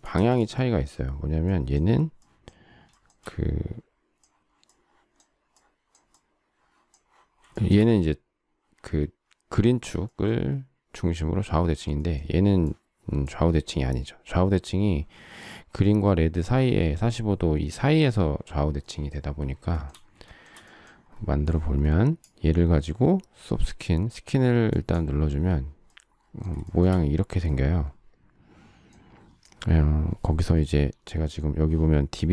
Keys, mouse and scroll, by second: 0.1 space, 3.0 shift+middle click, 7.5 shift+middle click, 19.8 shift+middle click, 20.2 shift+middle click, 26.6 shift+middle click.